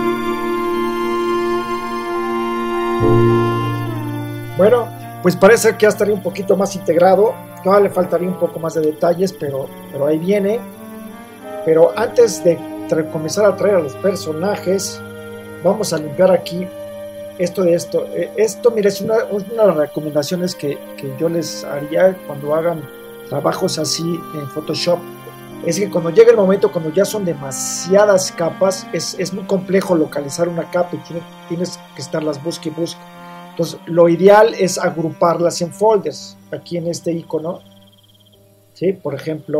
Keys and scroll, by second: 0.4 s, 2.3 super+0, 14.8 Tab.